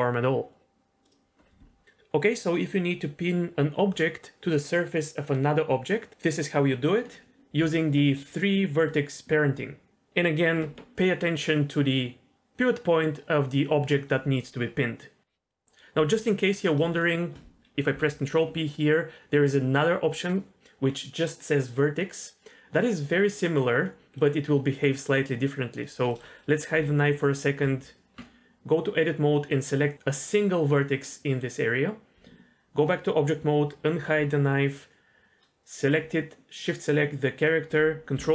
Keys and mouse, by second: 8.2 middle click, 8.8 Tab, 15.5 middle click, 17.9 ctrl+p, 23.8 click, 24.2 middle click, 24.7 middle click, 25.8 click, 26.1 middle click, 26.8 h, 27.6 Tab, 29.0 click, 29.3 middle click, 31.1 middle click, 32.1 Tab, 33.9 alt+h, 38.1 ctrl+p.